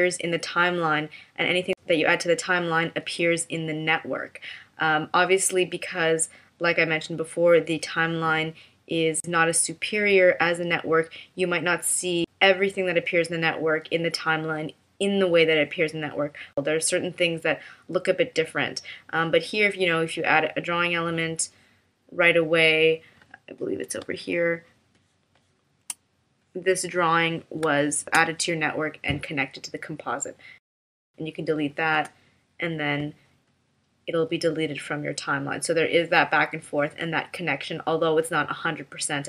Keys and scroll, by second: 24.0 space, 27.6 space, 29.5 space, 31.9 BackSpace.